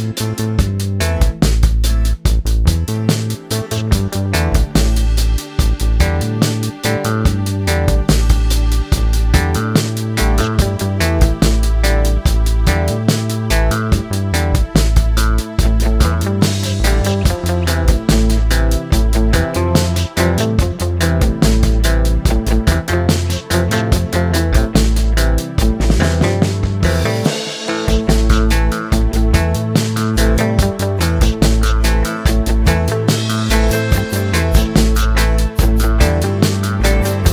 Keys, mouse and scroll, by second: 3.8 click, 4.6-5.7 drag, 7.0-8.1 middle drag, 9.0 space, 9.3 space, 12.0-13.0 drag, 14.0 middle click, 14.8 click, 15.5 right click, 16.0 middle click, 16.7 Tab, 17.3-18.4 right drag, 21.6 click, 22.7 middle click, 22.9 Tab, 23.1 middle click, 23.3 space, 23.6 space, 25.5 click, 26.4 middle click, 27.0-27.8 scroll down 1, 27.8-29.5 middle drag, 29.9 click, 31.3 click, 31.5 middle click, 32.3-33.5 drag, 33.5 middle click, 34.0 space.